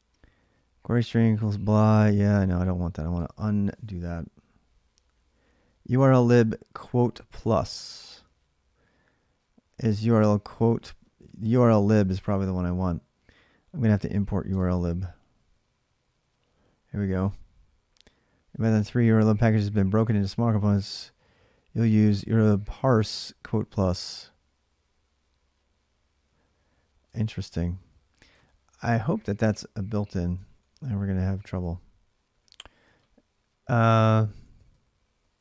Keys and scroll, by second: 14.2 space, 28.3 ctrl+a, 28.5 ctrl+a, 30.2 ctrl+[, 30.4 k, 31.0 k, 31.4 o, 33.7-35.4 typing.